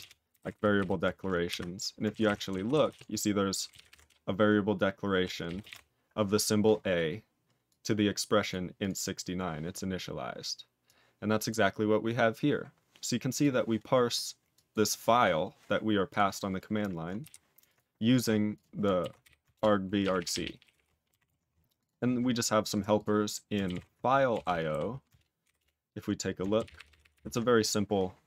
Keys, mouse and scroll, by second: 0.2 ctrl+g, 0.3 ctrl+n, 0.5 ctrl+n, 0.7 ctrl+n, 17.2 q, 18.5 ctrl+click, 18.5 click, 19.5 ctrl+Return, 20.0 ctrl+a, 20.1 ctrl+p, 20.3 ctrl+p, 20.4 ctrl+p, 20.6 ctrl+p, 21.2 ctrl+s, 21.8 double click, 22.6 click, 22.7 double click, 22.9 click, 23.2 click, 25.6 ctrl+Return, 26.6 ctrl+=.